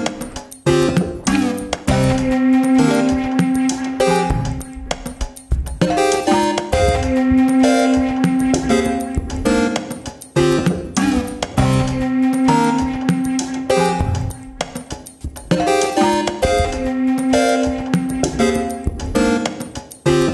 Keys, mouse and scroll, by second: 0.8 ctrl+r, 2.8 middle click, 3.3 click, 3.4 middle click, 4.1 alt+click, 4.3 middle click, 4.8 g, 6.2 alt+click, 6.6 g, 7.5-8.9 middle drag, 9.6 click, 9.9 scroll up 1, 10.1 ctrl+r, 11.9 middle click, 12.5 ctrl+r, 14.6-16.0 middle drag, 16.0 3, 16.6 alt+click.